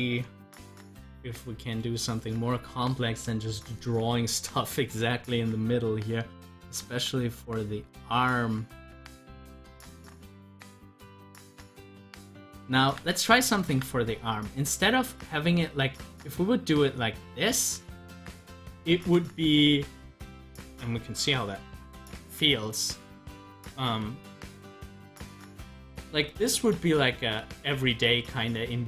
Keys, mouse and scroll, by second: 1.0 scroll down 1, 1.3 middle click, 1.8 scroll up 1, 4.6-11.4 drag, 11.6 click, 23.1 scroll down 1, 23.6 scroll up 1.